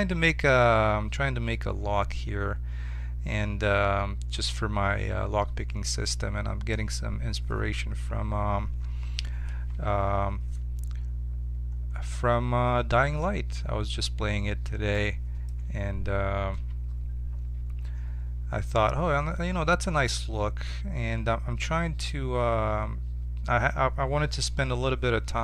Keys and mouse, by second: 0.1 Tab, 9.5 KP_7, 9.9 z, 11.1-13.0 middle drag, 16.5 z.